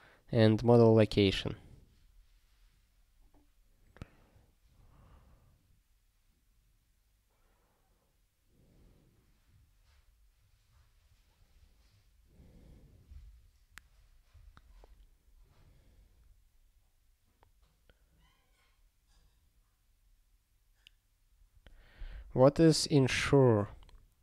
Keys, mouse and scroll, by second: 1.0 scroll down 1, 3.8-4.4 scroll down 1, 4.8 scroll up 4, 10.9 scroll down 1, 12.7 scroll down 1, 17.2 scroll down 1, 22.8 click.